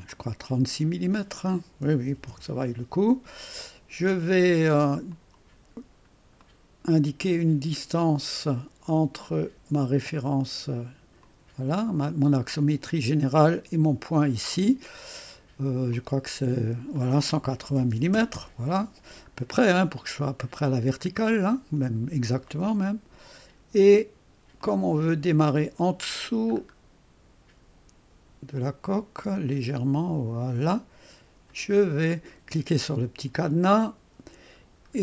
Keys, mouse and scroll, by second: 0.1 click, 1.6-2.6 typing, 4.5 typing, 5.1 click, 6.5-7.5 drag, 7.3-8.0 typing, 7.5 middle click, 11.3 click, 15.9 click, 17.7-18.6 typing, 19.8-20.2 scroll up 1, 19.8 typing, 20.5 right click, 21.1-21.6 scroll down 1, 21.6-26.1 drag, 25.6-26.3 typing, 26.1-27.5 scroll up 1, 28.6-30.6 drag, 30.3-31.8 typing, 31.5 click, 33.8 click, 34.0 typing, 34.5-34.9 scroll down 1.